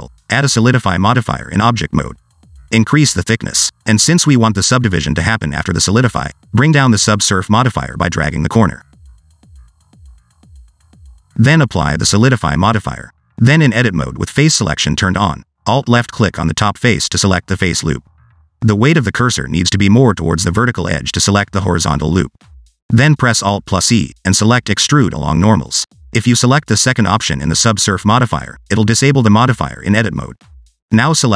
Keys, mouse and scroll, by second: 0.0 scroll up 2, 0.2 shift+middle click, 0.8 click, 3.4 click, 4.4 shift+middle click, 4.8-5.3 scroll up 2, 5.3 middle click, 7.7 click, 9.8 click, 11.7 click, 13.2 Tab, 13.6 middle click, 14.0 shift+middle click, 15.1 3, 17.1 alt+click, 19.3 alt+click, 21.1 alt+click, 23.0 alt+e, 25.7 scroll down 2, 25.8 middle click, 27.0 shift+middle click, 27.4-27.8 scroll up 2, 29.8 click, 30.9 alt+click.